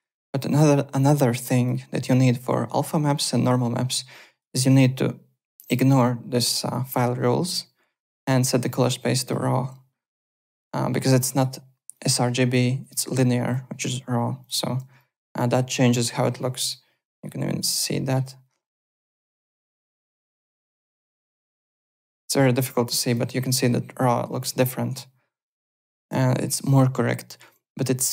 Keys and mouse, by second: 2.1 click, 4.1 click, 5.5 click, 8.1 click, 9.1 click, 11.1 click, 11.9 click, 12.8 click, 13.4 click, 14.4 click, 15.0 click, 15.6 click, 16.7 alt+middle click, 17.3 alt+right click, 17.7 alt+middle click, 18.8 click, 21.5 click, 23.0 click, 24.2 click.